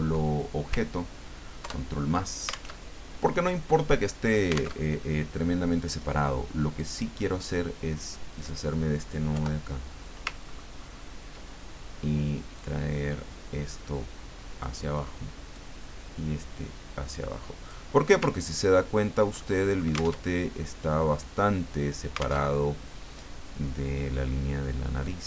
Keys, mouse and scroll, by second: 1.6 ctrl+KP_Add, 2.8 alt+Tab, 4.8 alt+Tab, 6.8 click, 8.4 click, 9.3 Delete, 10.4-11.1 ctrl+scroll up 2, 12.5-14.9 drag, 15.5-17.9 drag, 18.4-19.0 ctrl+scroll down 4, 19.5 ctrl+click, 20.2 ctrl+alt+Tab, 22.4 alt+Tab, 25.0-25.2 drag.